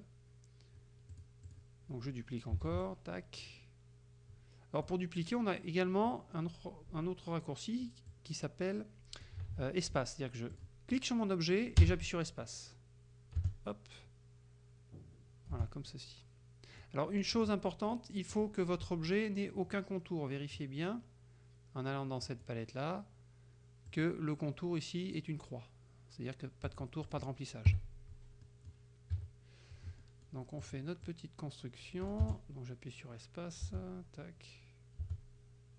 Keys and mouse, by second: 1.2 click, 1.5 click, 2.7 ctrl+d, 2.9-5.1 ctrl+drag, 8.2-9.5 drag, 9.6 ctrl+z, 10.6 click, 10.9-17.0 drag, 11.9 space, 13.4 space, 15.6 space, 17.4 click, 18.4 click, 22.3 click, 23.9 click, 26.8 click, 27.1 click, 27.7 KP_Subtract, 28.5 middle click, 29.2 KP_Subtract, 30.1 middle click, 30.7 click, 31.1-35.7 drag, 32.3 space, 33.7 space, 35.1 space.